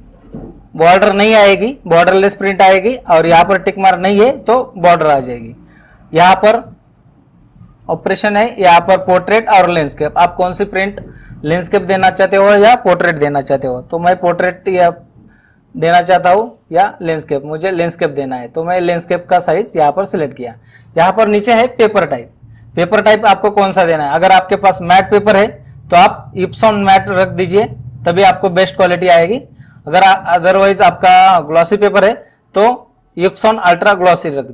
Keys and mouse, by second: 3.1 click, 17.0 click, 24.9 click.